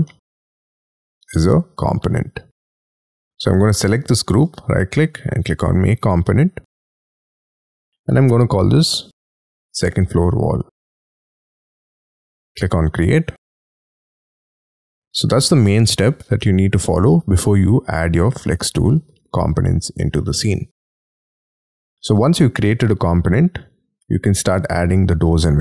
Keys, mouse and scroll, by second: 0.0 middle click, 4.4 right click, 9.3-12.6 typing, 14.6 middle click, 23.4 scroll down 1.